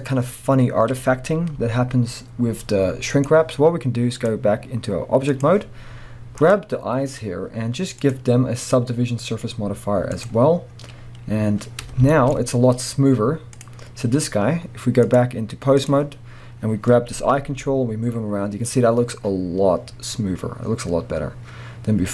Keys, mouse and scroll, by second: 1.6 g, 3.2 right click, 4.1-6.5 drag, 6.9-8.0 scroll down 1, 8.0 click, 8.6-12.1 drag, 11.8-12.1 scroll up 2, 12.1-13.5 shift+middle drag, 12.3-13.5 scroll up 2, 13.5 click, 15.0-22.1 drag, 17.4 g.